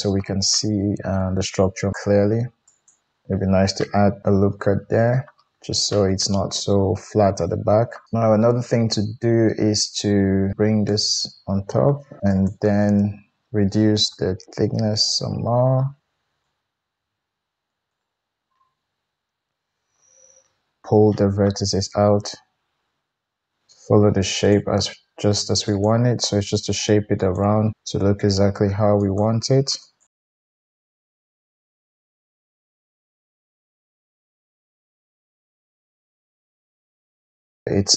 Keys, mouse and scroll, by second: 2.6 ctrl+r, 10.5 click, 12.2 middle click, 12.3-18.5 drag, 18.5-20.1 middle drag, 21.5 g, 23.9-25.6 middle drag, 25.6 click, 25.8-29.8 middle drag, 26.1 g, 28.0 g, 29.8 click, 30.0-31.4 middle drag, 30.2 g, 31.0 g, 31.4 click, 31.5 middle click, 31.6 g, 32.4 click, 32.6-33.1 middle drag, 32.6 g, 33.1 click, 33.2 g, 33.7 g, 34.0-35.6 middle drag, 35.6-37.7 drag, 37.7 middle click, 37.7 g, 37.8 click.